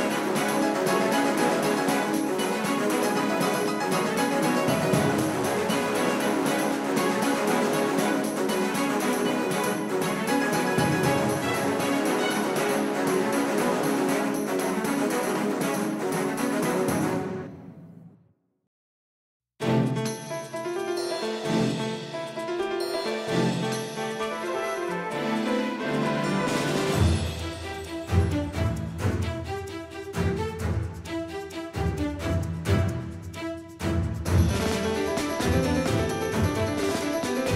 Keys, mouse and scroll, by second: 4.7-6.9 drag, 16.8-19.0 middle drag, 19.0 KP_5, 19.5 KP_1, 20.1 KP_3, 20.6 KP_5, 22.6-23.9 middle drag, 26.7-29.9 drag, 31.7-33.9 drag, 35.4-37.5 drag.